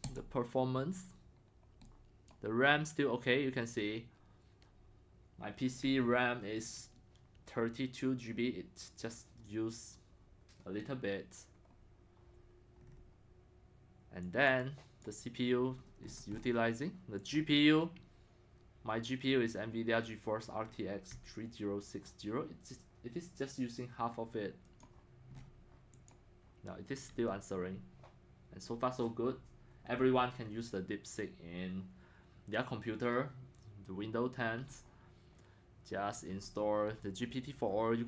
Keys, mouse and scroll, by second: 24.8-25.4 drag, 25.4 middle click, 25.4-26.1 scroll down 5, 26.1-29.8 drag.